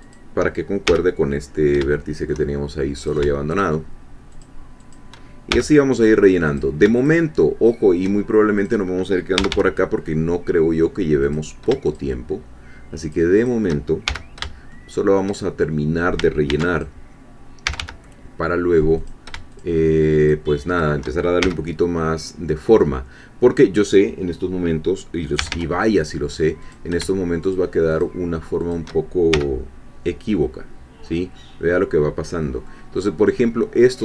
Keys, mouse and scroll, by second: 0.1 shift+click, 0.9 shift+f, 1.9 shift+middle click, 3.1 click, 3.6 shift+click, 4.9 shift+click, 5.5 shift+f, 6.5 click, 7.0 shift+click, 8.6 click, 9.4 g, 11.2 click, 11.8 shift+click, 13.1 shift+click, 14.0 shift+f, 14.7 shift+middle click, 16.5 ctrl+r, 16.8 ctrl+click, 17.6 g, 19.0 click, 19.6 shift+click, 20.8 shift+click, 21.4 shift+f, 23.8 click, 25.4 g, 26.6 click, 27.5 shift+click, 28.7 shift+click, 29.3 shift+f, 29.6-30.0 scroll down 1, 30.4-32.9 middle drag, 32.9 scroll up 1.